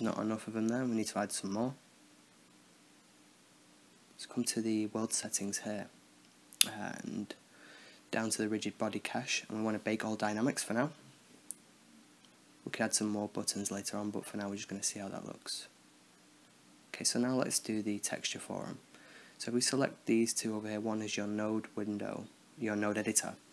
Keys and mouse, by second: 0.0-1.0 drag, 1.0-3.6 middle drag, 3.6-4.8 drag, 4.8-6.8 middle drag, 6.8-14.7 drag, 15.9 click, 16.3 middle drag, 18.0 n, 18.4-20.8 drag, 20.8-22.3 middle drag, 22.3 shift+a.